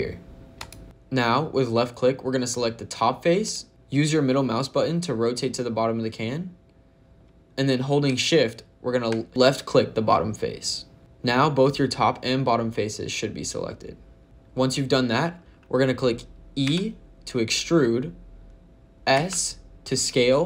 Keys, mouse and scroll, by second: 0.8 click, 3.3 click, 3.7 middle click, 7.2-9.0 scroll down 1, 9.3 shift+click, 11.0 middle click, 16.5 e, 19.0 s.